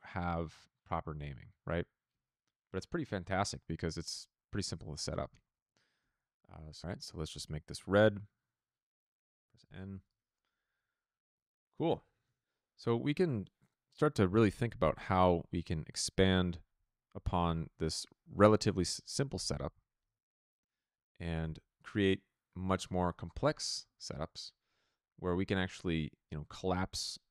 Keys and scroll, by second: 2.0 p, 5.9 p, 7.2 1, 7.9 Return, 9.5 n, 12.2 shift+v, 14.7 p, 17.0 a.